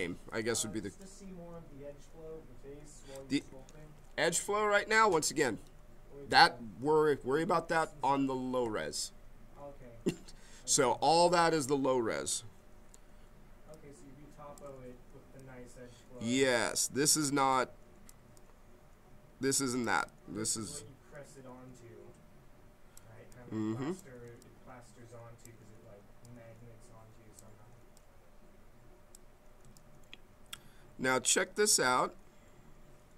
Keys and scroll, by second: 3.6 ctrl+z, 12.9 b.